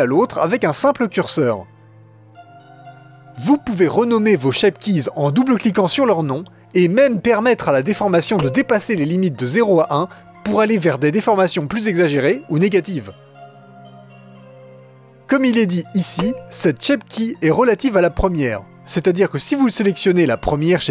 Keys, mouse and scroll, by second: 5.8-8.3 drag, 14.0-16.4 drag, 19.2 click.